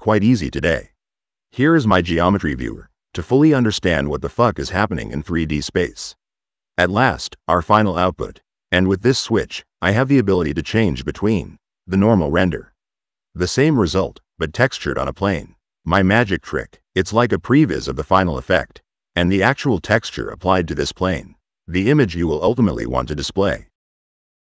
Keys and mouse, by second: 2.5-3.6 drag, 6.8-8.8 drag, 9.5 click, 11.2-11.6 drag, 13.8-18.0 drag, 18.9 drag, 20.7 click, 23.0 click.